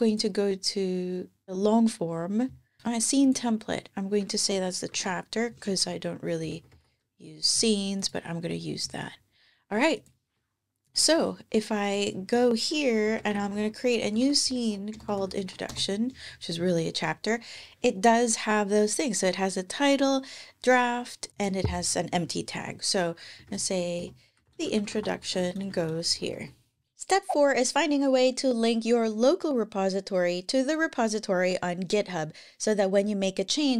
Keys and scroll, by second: 4.1-7.0 typing, 12.8-14.3 typing, 23.0-24.2 typing.